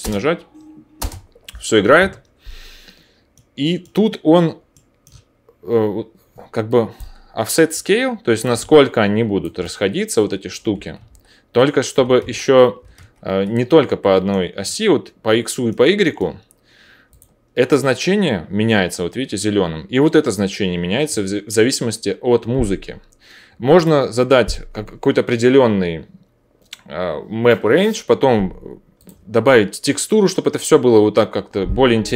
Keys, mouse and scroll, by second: 0.0 space, 1.0 space, 6.8-9.0 middle drag, 11.0 ctrl+z, 12.9 ctrl+shift+z, 17.2-28.9 drag, 29.1-32.1 drag.